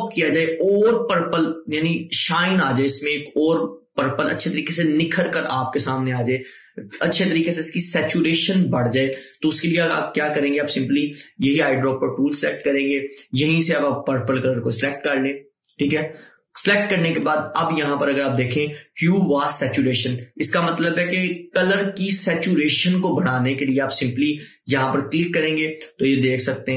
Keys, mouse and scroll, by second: 12.5 click, 15.8 click, 24.8-26.7 drag.